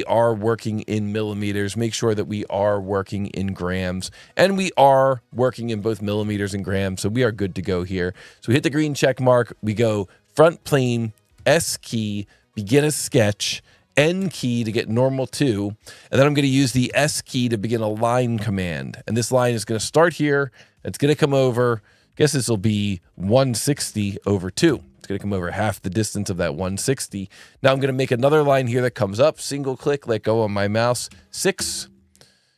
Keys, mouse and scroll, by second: 0.1 click, 1.7 right click, 2.8 click, 4.5 click, 6.2 alt+1, 8.2 click, 10.2 click, 11.1-11.9 typing, 12.7 click, 14.2 n, 16.8 s, 18.4 click, 20.4 click, 22.7 click, 23.5 KP_1, 23.6 KP_6, 23.7 KP_0, 24.0 KP_Divide, 24.2 KP_2, 24.8 KP_Enter, 28.9 click, 31.0 KP_6, 31.6 KP_Enter.